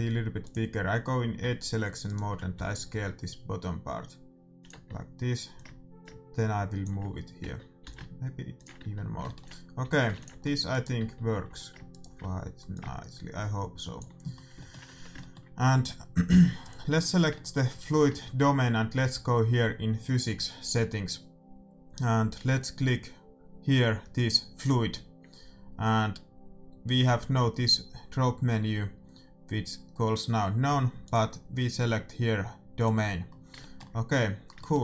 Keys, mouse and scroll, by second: 0.5-2.1 drag, 2.1-3.7 right drag, 2.5 s, 4.7 Tab, 5.5 click, 5.9-7.8 drag, 7.4 Tab, 7.8 s, 8.8 Tab, 8.9-10.9 middle drag, 9.8 a, 10.1 ctrl+s, 10.7 right click, 11.0 Tab, 11.1 right click, 11.4 a, 12.7-14.5 drag, 12.7 right click, 14.3-20.9 middle drag, 14.8 Tab, 16.9-18.6 right drag, 24.5-26.3 drag, 31.0-32.8 drag, 33.2-34.8 middle drag.